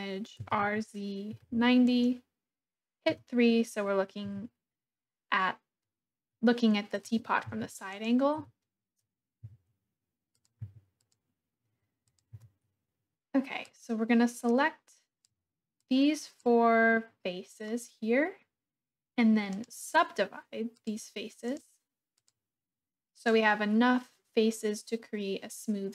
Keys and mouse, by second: 0.3 r, 0.6 z, 1.3 9, 1.5 0, 1.8 Return, 3.1 KP_3, 4.2 g, 7.1 g, 7.4 x, 8.0 click, 8.3 g, 9.4 y, 10.4 click, 10.7 s, 11.0 click, 12.4 Tab, 13.6-15.2 drag, 15.8 click, 19.6-20.8 drag, 21.5 click, 23.3-25.9 drag.